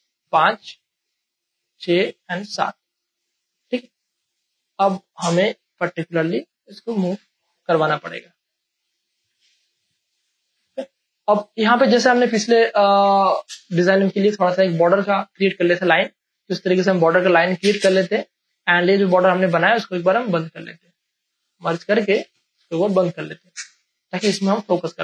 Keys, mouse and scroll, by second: 0.3 space, 0.5 click, 0.6-4.9 drag, 4.9 space, 5.1 ctrl+click, 6.8-8.6 drag, 8.6-10.2 drag, 10.2 space, 10.4 click, 10.7 space, 10.9 ctrl+click, 11.4 click, 13.3 Return, 14.5 scroll up 1, 15.6 click, 21.4 click, 22.5 ctrl+e, 23.4 click, 23.8 space, 24.3 ctrl+click, 24.7 v, 24.8 click.